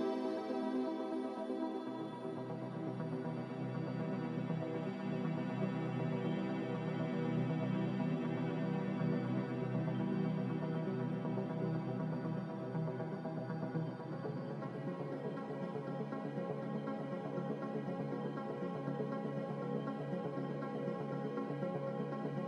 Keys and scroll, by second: 4.0 typing, 9.9 ctrl+z, 10.5 ctrl+z.